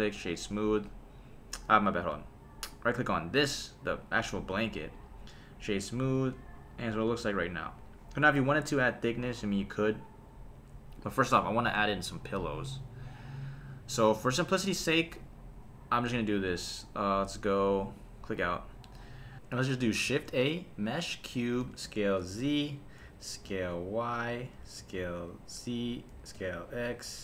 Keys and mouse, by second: 2.0 super+z, 2.7 click, 3.3 space, 4.4 space, 4.9 right click, 6.1 space, 7.1 space, 11.5 shift+Left, 15.2 KP_7, 17.9 click, 20.1 shift+a, 21.6 s, 21.8 z, 22.7 click, 23.0 s, 23.4 y, 24.3 click, 24.6 s, 24.8 z, 25.8 click, 26.1 s, 26.3 x.